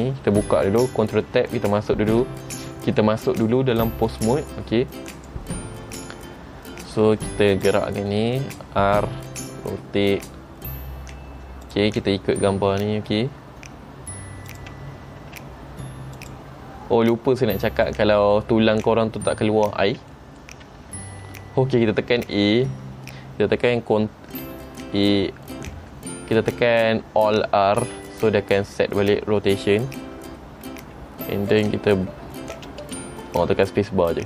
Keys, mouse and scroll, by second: 1.6 ctrl+Tab, 5.3 click, 7.8 click, 9.7 r, 14.6 click, 15.4 r, 18.0 middle click, 20.3 middle click, 22.4 a, 27.9 alt+r, 31.7 click, 32.7 space, 33.0 space.